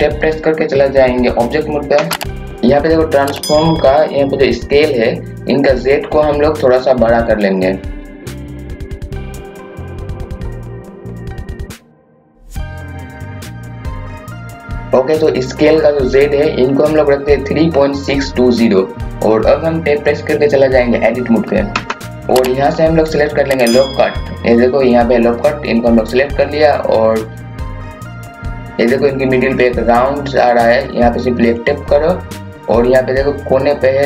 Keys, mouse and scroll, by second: 1.9 Tab, 2.5 KP_1, 7.6-10.4 drag, 10.6 scroll down 1, 11.0-12.4 drag, 13.1 click, 14.5 scroll up 1, 19.0 scroll down 1, 19.5 scroll up 1, 21.7 Tab, 27.4 click, 28.5 scroll up 1, 31.5 click.